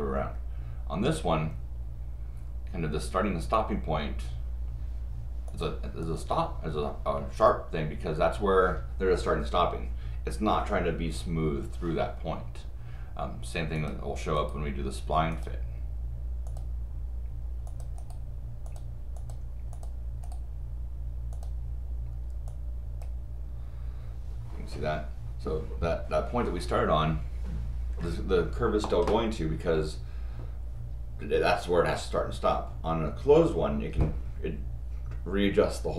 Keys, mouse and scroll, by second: 5.5 click, 6.0 click, 13.8 click, 14.4 right click, 15.3 click, 16.5 click, 17.7 click, 18.0 right click, 18.6 click, 19.2 click, 19.7 click, 20.2 right click, 21.3 click, 22.5 click.